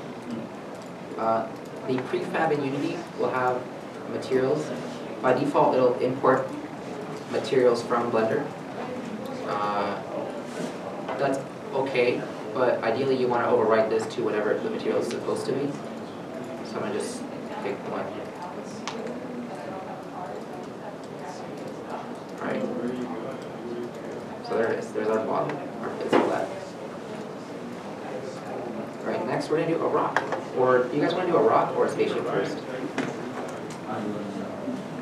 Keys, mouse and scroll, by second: 4.1 alt+Tab, 4.2-4.6 scroll down 1, 24.8 right click, 26.2 w, 29.2-30.4 scroll down 1, 30.4 middle click.